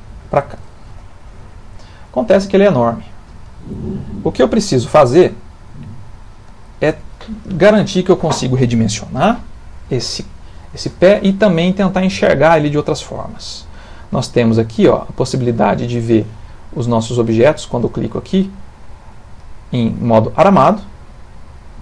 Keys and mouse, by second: 1.6 middle click, 6.2 click, 12.8 middle click, 15.1 click, 16.0 middle click, 19.7 middle click.